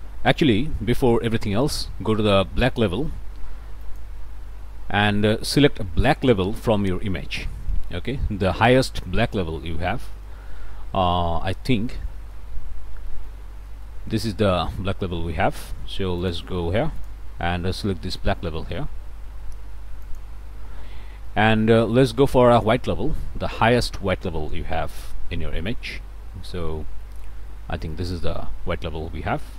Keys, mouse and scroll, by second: 3.8 click, 6.9-7.2 scroll up 1, 7.6 click, 8.2 scroll down 2, 8.6-10.4 middle drag, 10.5 scroll up 2, 11.1 middle click, 12.1 middle click, 12.6 scroll up 2, 13.1 click, 13.7 click, 13.8 scroll up 1, 16.2 click, 17.0 click, 20.0 click, 20.6 scroll up 1, 21.2 click, 21.7 scroll down 1, 22.1-23.4 middle drag, 24.1 scroll up 1, 24.5-26.1 middle drag, 26.2-26.5 scroll up 1, 27.0 middle click, 27.4 scroll up 1, 27.9 middle click.